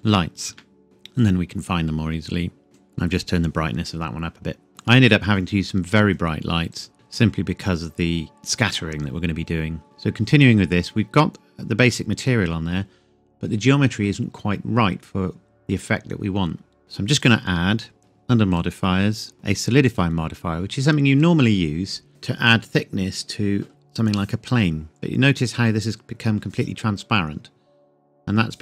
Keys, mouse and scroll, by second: 0.5 KP_Enter, 0.8 click, 6.7 click, 9.8 click, 17.2 click, 19.9 click.